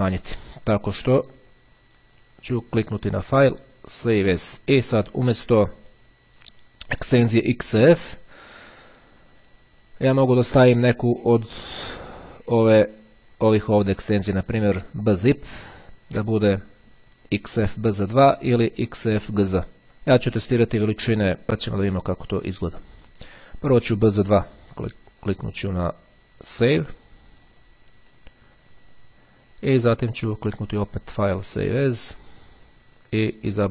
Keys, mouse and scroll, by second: 0.2 click, 1.0 click, 3.0 click, 4.2 click, 11.8 click, 13.8 click, 18.5 click, 20.3 click, 21.7 click, 22.4 click, 26.8 click, 30.4 click, 32.0 click, 33.6 click.